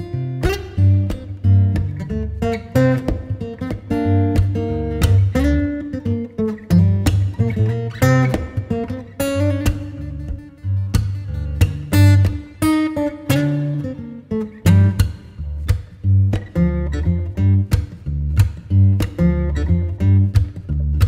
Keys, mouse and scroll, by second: 1.3-3.2 scroll down 7, 3.2 ctrl+s, 4.3 Tab, 4.7-5.5 scroll up 8, 5.5 scroll down 3, 6.1-8.1 scroll down 2, 8.1 scroll down 3, 8.9-12.0 middle drag, 12.4 KP_1, 16.0 r, 18.5 KP_0, 20.3 ctrl+s.